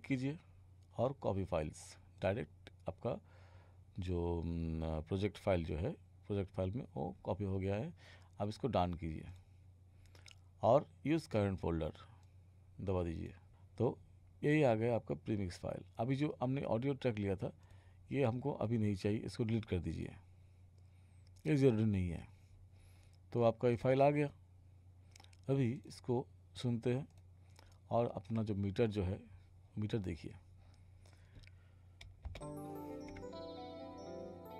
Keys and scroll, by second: 32.3 space.